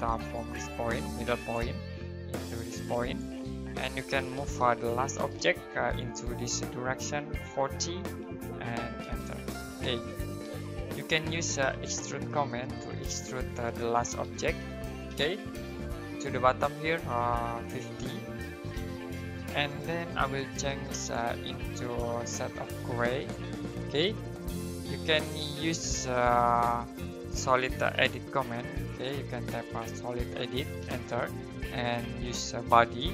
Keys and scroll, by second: 4.1-5.4 typing, 7.5-9.0 typing, 10.9-13.0 typing, 14.1 l, 17.5-18.7 typing, 27.7-29.7 typing, 30.8 space.